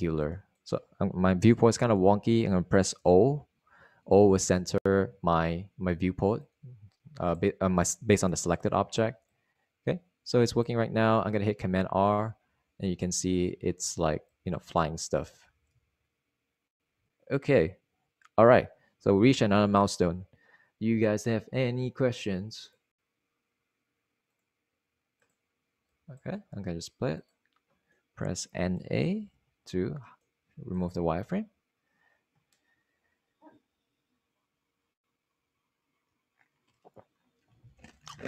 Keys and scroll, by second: 4.2 o, 13.2 super+r, 16.7 super+r, 30.1-31.1 typing.